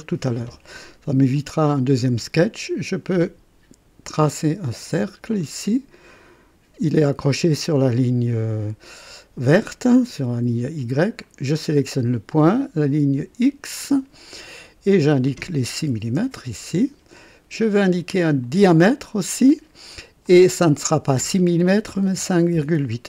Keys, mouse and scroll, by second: 1.6 click, 4.1 click, 4.9 click, 5.4 right click, 11.2 click, 13.4 click, 14.9 click, 15.9 KP_6, 16.2 KP_Enter, 18.4 click, 20.2 click, 21.8 KP_5, 22.1 KP_Decimal, 22.7 KP_8.